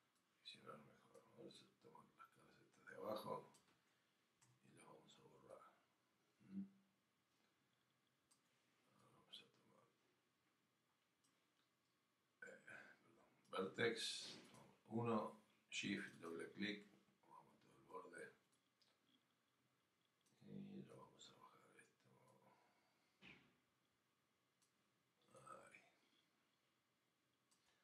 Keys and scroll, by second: 20.9 alt+w.